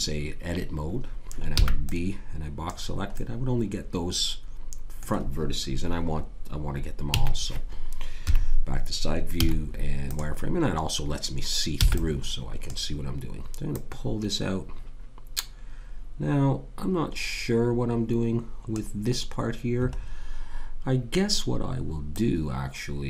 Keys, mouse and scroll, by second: 1.6 b, 3.1-4.7 middle drag, 7.1 a, 8.2 KP_3, 9.4 z, 12.6 b, 13.7 click, 19.9-22.1 middle drag, 22.1 click.